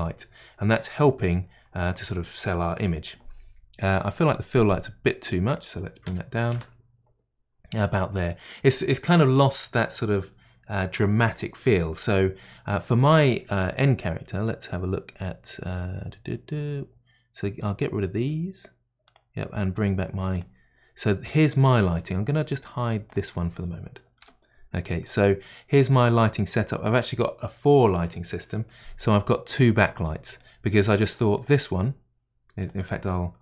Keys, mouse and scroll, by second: 4.1 click, 5.5-8.5 drag, 17.8 click, 20.4 click, 23.1 click, 24.3 h, 25.7-26.9 middle drag, 26.9-28.7 scroll up 1, 28.7-29.5 middle drag, 29.5 click, 30.0-31.3 middle drag, 31.3 click, 32.6 click.